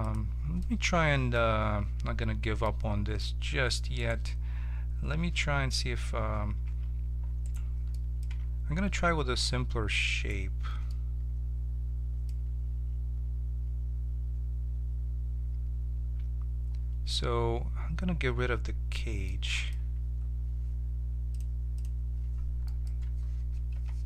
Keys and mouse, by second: 0.6-1.9 drag, 1.7 1, 3.9-6.6 right drag, 6.6 2, 7.4-8.5 drag, 7.9-9.8 right drag, 8.2 z, 10.0 right click, 21.3-23.7 drag, 23.7 KP_7.